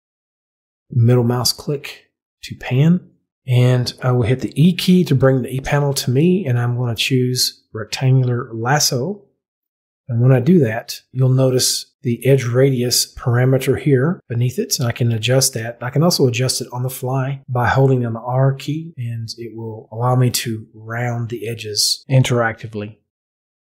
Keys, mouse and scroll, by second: 0.3-3.3 middle drag, 7.9 e, 9.6 click, 10.8 e.